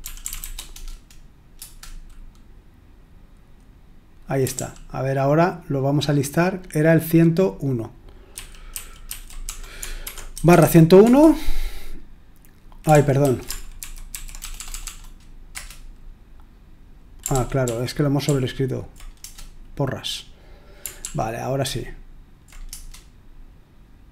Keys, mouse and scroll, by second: 0.0-0.8 typing, 1.5 Return, 4.5 ctrl+p, 8.3 ctrl+w, 8.7 ctrl+w, 9.0 ctrl+w, 9.4-11.0 typing, 12.9 ctrl+p, 13.2 ctrl+a, 13.8 alt+f, 14.1 alt+f, 14.3 BackSpace, 14.5 BackSpace, 14.7 BackSpace, 14.8 BackSpace, 15.5 Return, 17.3 ctrl+p, 17.6 ctrl+p, 18.2 ctrl+p, 19.2 Return, 21.0 ctrl+p, 21.6 ctrl+p, 22.7 Return.